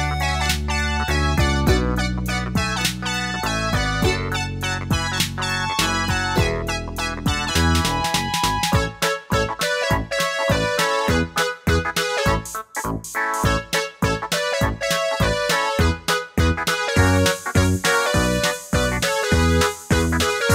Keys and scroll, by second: 0.8 Down, 14.9-16.5 typing, 18.8 super+d.